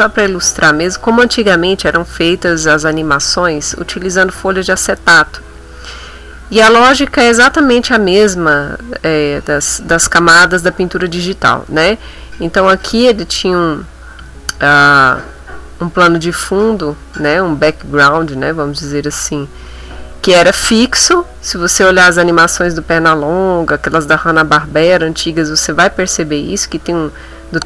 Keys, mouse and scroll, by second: 0.0 middle click, 2.7 middle click, 15.4 click.